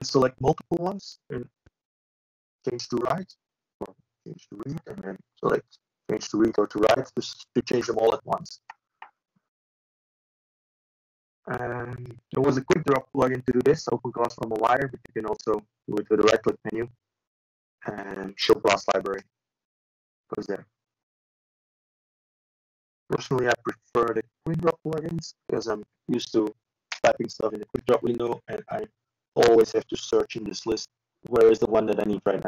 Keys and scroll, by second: 8.1 Return, 8.2 Return, 8.6 ctrl+v, 14.9 ctrl+e.